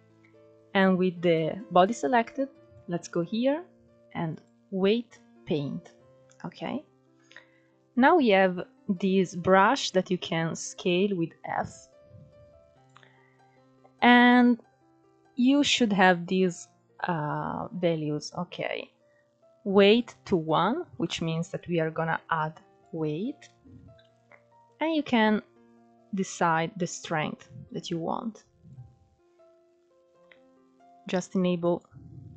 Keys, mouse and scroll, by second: 0.8-4.0 drag, 4.1-4.5 scroll down 1, 4.5-4.9 scroll up 2, 4.9 middle click, 5.7-6.2 scroll down 2, 6.2 scroll up 2, 7.3 f, 19.2 middle click, 19.9-22.0 drag, 22.0 ctrl+z, 22.9-26.0 drag, 27.8-29.0 scroll up 1, 29.0-29.9 scroll up 1, 29.9 click, 31.7 scroll down 1, 32.0 middle click.